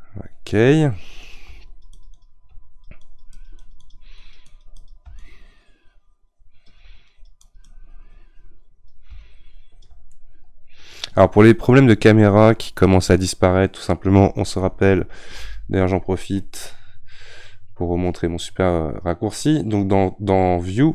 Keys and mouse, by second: 0.6-10.1 drag, 10.1-13.7 middle drag, 15.4 n.